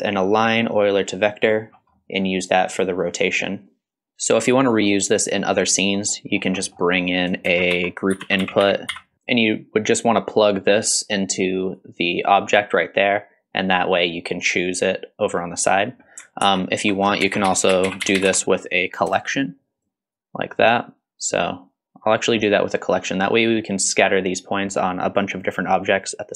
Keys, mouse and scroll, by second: 1.7 scroll down 1, 1.9 middle click, 4.0 middle click, 4.0 shift+a, 4.6 scroll up 2, 5.4 middle click, 5.9-6.6 scroll up 3, 6.6 middle click, 6.9 click, 7.4 shift+a, 9.1 ctrl+z, 9.1 click, 10.0-11.8 drag, 16.4 ctrl+z, 17.2 shift+a, 18.1 l, 20.1 click, 21.2-22.5 drag.